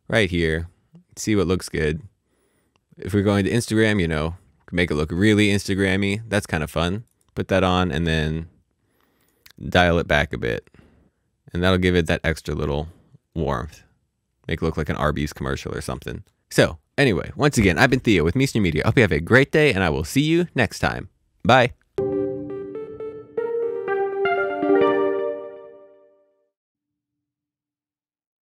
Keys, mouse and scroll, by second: 1.4 click, 2.6 scroll down 1, 7.2 click, 8.8 click, 16.3 ctrl+d.